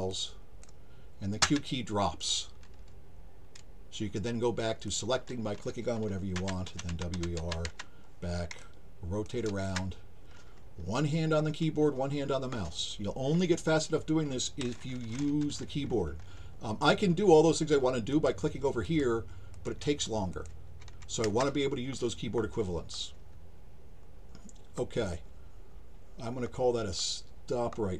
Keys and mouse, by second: 0.1 click, 4.9 click, 8.6 alt+click, 9.6 alt+shift+click, 18.1 click, 18.8 click, 19.5 click, 20.3 click.